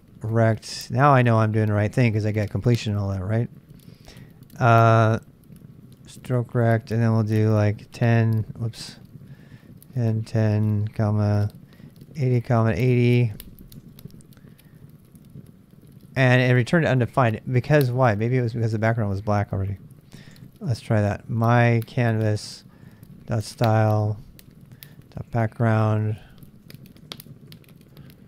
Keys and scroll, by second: 0.0-0.3 typing, 1.0 Tab, 8.0-13.4 typing, 13.8 Return, 20.9-28.2 typing, 25.3 Tab.